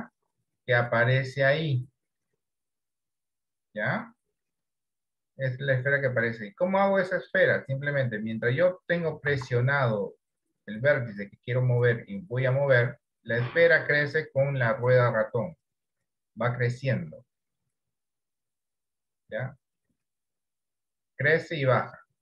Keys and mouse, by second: 9.4 ctrl+z, 12.0-22.2 drag.